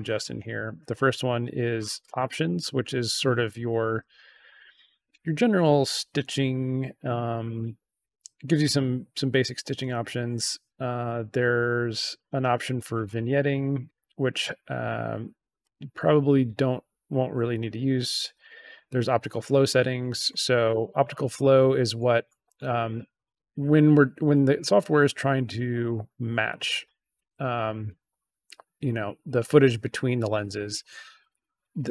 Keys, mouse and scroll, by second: 11.0-13.0 drag, 15.5-17.6 drag.